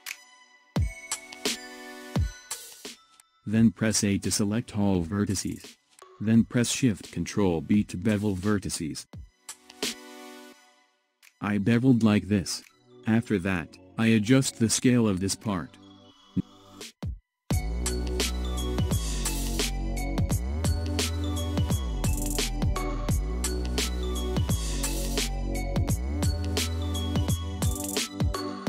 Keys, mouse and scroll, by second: 1.9 click, 8.3 ctrl+shift+b, 16.9 a, 18.3 s, 22.0-24.5 middle drag, 24.5-25.0 scroll up 3, 25.0-28.0 middle drag.